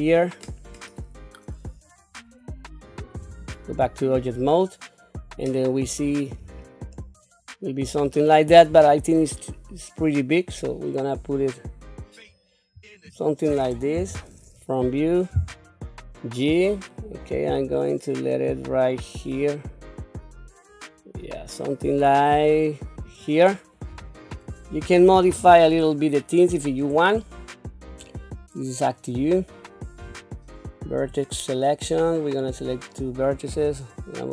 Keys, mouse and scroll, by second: 3.2 Tab, 4.6-6.2 middle drag, 6.4 scroll down 2, 6.9-8.1 middle drag, 8.7 s, 13.9 KP_1, 15.3 g, 23.9 Tab, 24.3 scroll up 2, 25.3 q, 25.8-26.8 scroll up 2, 27.1 shift+middle click, 30.0 1, 31.1-32.4 drag, 33.5 g.